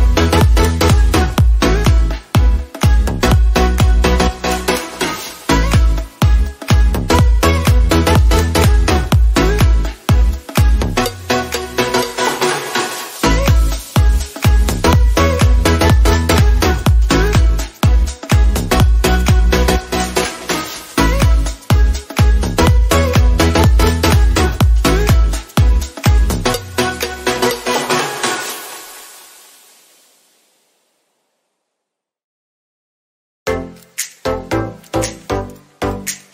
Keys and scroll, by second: 4.7 ctrl+g.